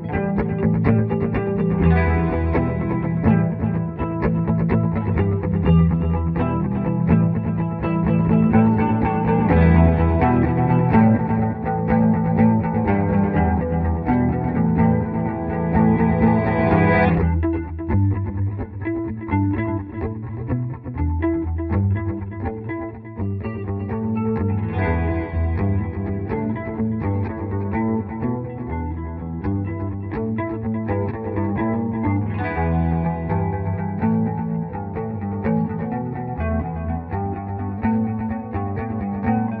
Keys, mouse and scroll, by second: 3.4 click, 15.1 click, 15.4 F2, 15.9-17.2 drag, 16.8 typing, 18.9 typing, 19.7-21.4 drag, 20.1 typing, 21.5 F3, 23.1-24.3 drag, 25.2-26.2 typing, 25.4 shift+click, 26.2 click, 26.5 F4, 27.0 click, 29.0-30.4 drag, 30.4 F4, 33.3 click, 34.4 ctrl+r, 35.4-36.9 drag, 36.9 right click, 38.9 click.